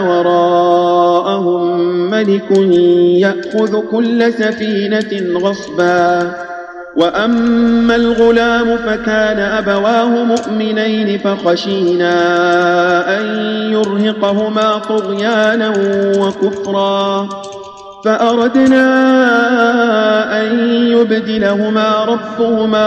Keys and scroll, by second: 2.5 space, 4.9 space, 6.1 space, 10.3 space, 12.3 space, 13.7 space, 14.8 space, 16.0 space, 17.2 space.